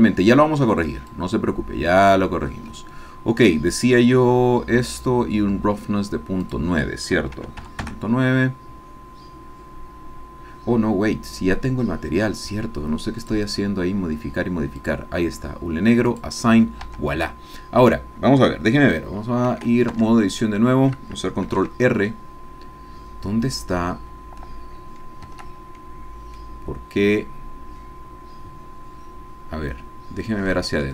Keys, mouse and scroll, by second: 1.1-2.3 drag, 4.0-5.1 scroll down 2, 6.4 click, 7.4 KP_Decimal, 7.6 KP_9, 7.9 KP_Enter, 9.3-10.2 scroll down 2, 10.2-10.6 scroll up 3, 10.9-12.1 scroll up 3, 13.2 click, 14.9 click, 16.1 click, 16.9 Tab, 20.0 Tab, 21.5 ctrl+r, 25.3 Escape, 25.7-26.2 scroll down 1, 26.4-30.5 drag, 30.7-30.9 ctrl+drag.